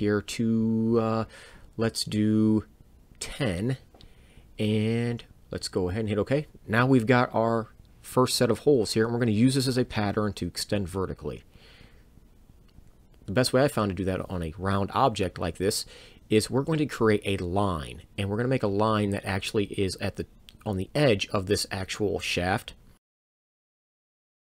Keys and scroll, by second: 2.3 ctrl+shift+8, 4.5 BackSpace, 5.9 1, 6.2 0, 9.5 Return, 23.8 l.